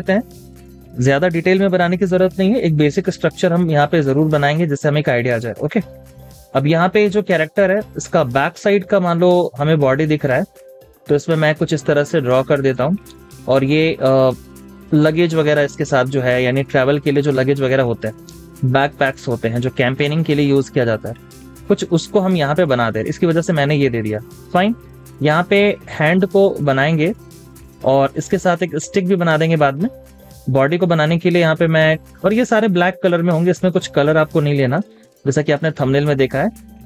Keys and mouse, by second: 1.8 b.